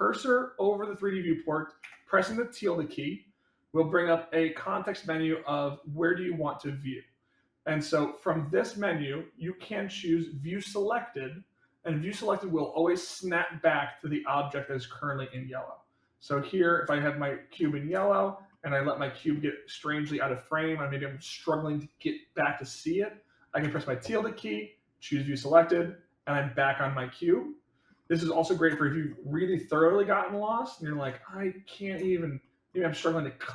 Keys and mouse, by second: 16.9-17.4 shift+middle drag, 18.4-18.9 shift+middle drag, 19.2 shift+middle click, 26.8-27.8 middle drag, 28.8 shift+middle click, 29.6 shift+middle click, 30.3 shift+middle click, 30.8 shift+middle click, 31.1 middle click, 32.3 shift+middle click, 32.9 shift+middle click, 33.3-33.5 shift+middle drag.